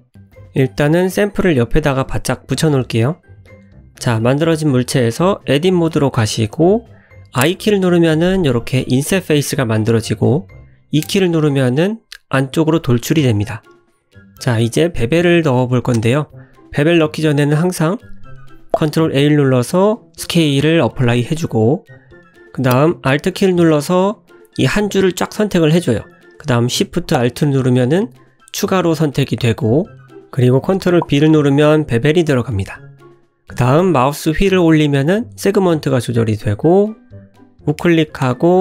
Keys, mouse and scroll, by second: 0.3 click, 0.6 shift+d, 2.1 middle click, 2.6-3.0 scroll up 4, 3.1 shift+middle click, 3.7 click, 4.8 3, 5.1 click, 6.4 i, 9.6 e, 12.3 Tab, 12.7 middle click, 14.4 click, 14.7 Tab, 15.1 scroll up 1, 17.1 Tab, 17.4 click, 18.8 ctrl+a, 20.6 Tab, 21.1 middle click, 23.1 2, 24.1 alt+click, 26.1 alt+shift+click, 28.1 ctrl+b, 35.2 Tab, 35.6 middle click, 36.3 shift+middle click, 36.5-36.8 scroll up 3, 37.0 middle click, 37.7 scroll down 1, 38.2 right click.